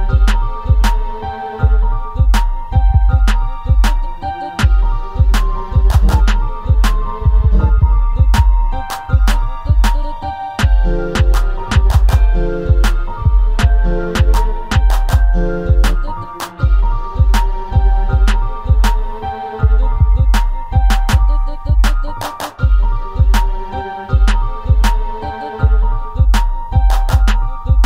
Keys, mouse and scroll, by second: 4.8-11.2 drag, 14.6-18.6 drag, 18.6-19.4 scroll down 5, 20.1-20.4 scroll down 2, 20.4-22.4 scroll up 3, 22.4-23.4 middle drag, 23.4-24.7 scroll down 7, 24.7 scroll up 1, 25.0 click, 25.5-26.3 scroll up 2, 26.3-27.8 middle drag.